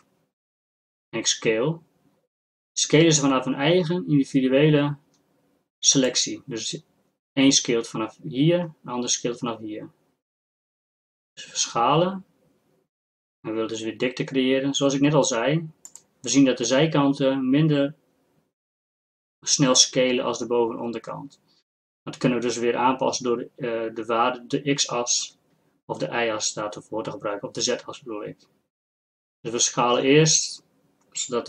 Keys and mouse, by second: 0.1 s, 11.7 s, 25.3 s.